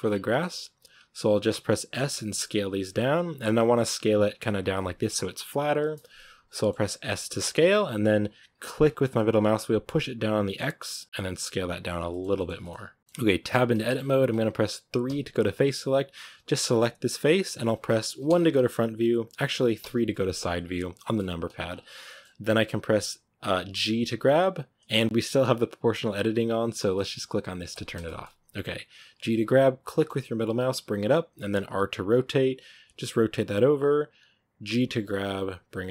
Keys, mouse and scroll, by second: 0.3-0.9 scroll up 3, 1.8 s, 3.4-6.9 middle drag, 6.9 s, 11.0 middle click, 11.2 s, 12.0-12.7 shift+middle drag, 12.7 scroll up 2, 12.9 middle click, 13.4 Tab, 13.7-14.9 shift+middle drag, 14.9 3, 16.7-18.2 right drag, 18.2 KP_1, 19.7 KP_3, 20.5-20.9 scroll up 1, 20.9-21.3 shift+middle drag, 21.3 scroll up 1, 21.6-21.9 scroll down 4, 21.9-23.7 shift+middle drag, 23.7 g, 27.6 click, 27.9-29.1 shift+middle drag, 29.1 g, 31.4 r, 34.6 g.